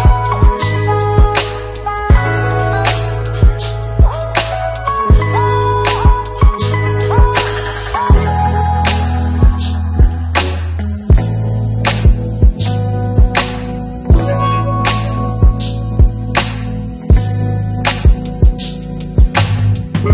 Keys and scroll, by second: 19.3 shift+F4.